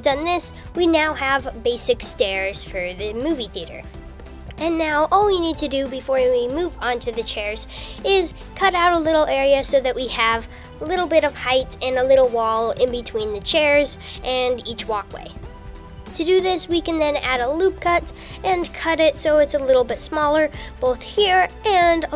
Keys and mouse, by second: 3.6 KP_6, 4.3 KP_5, 5.3 KP_6, 5.5 KP_5, 6.4 KP_6, 9.6 KP_7, 11.5 g, 16.0 super+r, 21.2 super+z, 21.5 super+t, 21.6 super+r, 21.9 super+z, 22.0 super+r.